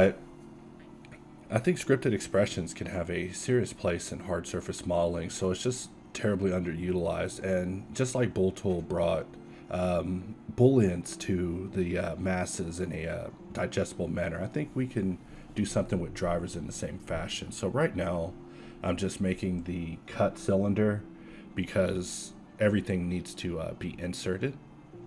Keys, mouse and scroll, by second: 0.5 alt+a, 1.2 shift+c, 1.4 shift+a, 4.1 ctrl+1, 4.8 ctrl+z, 5.0 1, 5.5 q, 7.8 ctrl+1, 8.6 alt+c, 10.3 z, 10.7 KP_1, 11.6 q, 13.9 Tab, 14.4 z, 14.7 ctrl+Tab, 15.7-17.5 typing, 19.0 click, 19.4 ctrl+r, 20.7 z, 21.2 ctrl+Tab, 22.6 e, 23.0 alt+s, 23.7 Tab, 24.3 q.